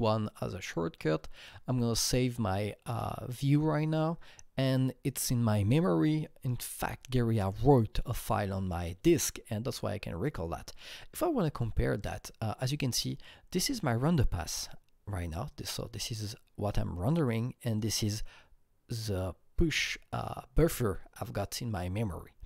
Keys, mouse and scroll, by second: 1.3 click, 3.6 ctrl+s, 3.6 click, 3.8 click, 12.0 click, 13.5 click, 13.5 click, 17.7-20.0 drag.